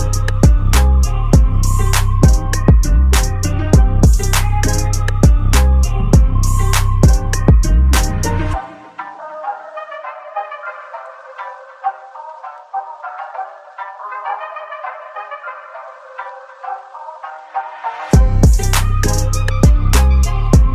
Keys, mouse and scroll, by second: 0.6-1.6 scroll down 1, 1.6-5.5 right drag, 5.5 click, 8.1-8.9 scroll up 1, 8.9 click, 13.0 click, 13.4 scroll up 1, 13.9-15.7 alt+drag, 15.7 4, 17.2-18.8 alt+middle drag, 18.8-19.2 scroll up 1, 19.4-20.7 alt+middle drag.